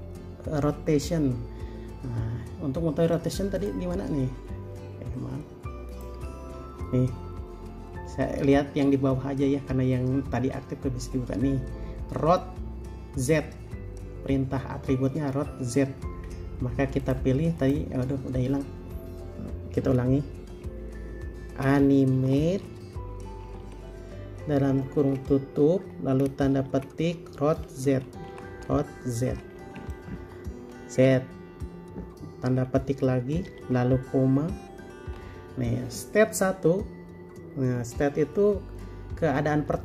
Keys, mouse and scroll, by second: 5.1 Escape, 16.2 Escape, 22.3-23.8 typing, 24.9 typing, 26.8 typing, 28.5-29.5 typing, 31.2 typing, 33.7 typing, 35.4 typing.